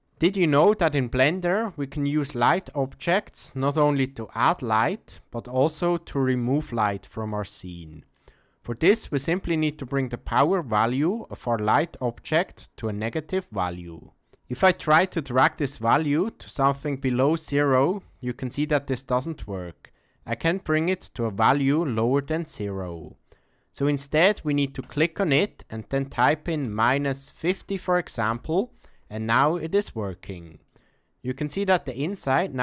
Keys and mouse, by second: 0.4-1.3 ctrl+middle drag, 1.6 shift+middle click, 2.3 middle click, 3.4 g, 15.1-16.3 drag, 17.0-18.0 drag, 18.9 click, 21.8 click, 24.8-28.9 drag, 30.7-31.3 middle drag.